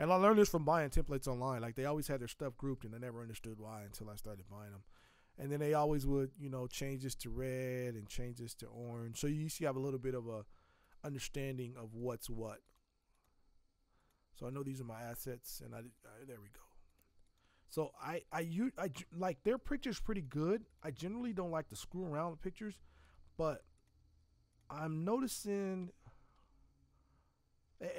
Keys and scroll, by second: 20.0 z, 21.1 space.